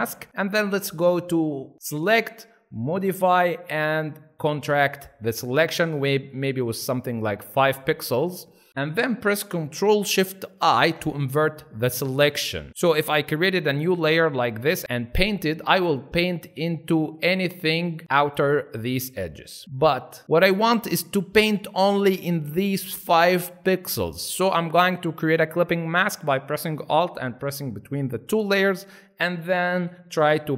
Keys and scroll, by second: 8.7 ctrl+z, 10.6 ctrl+shift+i, 11.3 ctrl+alt+shift+i, 12.7 ctrl+z, 15.0 ctrl+alt+z, 20.4 ctrl+alt+z, 29.7-30.5 typing.